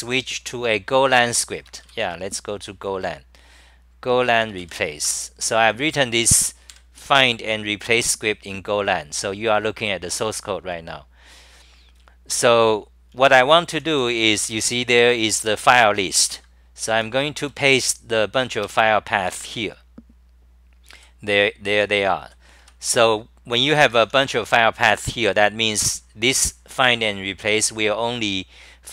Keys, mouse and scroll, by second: 6.1 Return, 6.7 super+=, 12.0-13.9 typing, 15.0 c, 15.4 2, 16.3 ctrl+g, 16.9 t, 17.4 Return, 18.7 k, 19.3 o, 21.0-23.1 typing.